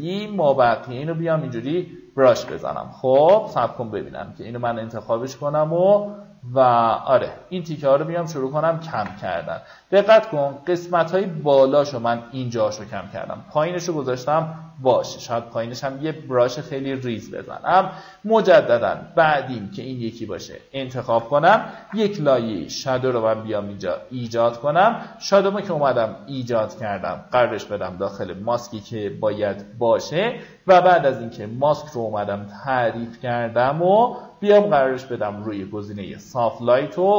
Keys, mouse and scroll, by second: 3.6 click, 6.3 x, 6.7-8.3 drag, 10.5-13.1 drag, 19.6 ctrl+click, 20.2 ctrl+click, 21.1 ctrl+alt+shift+n, 22.5 d, 23.0 click, 24.3 ctrl+d, 26.4-37.1 ctrl+drag.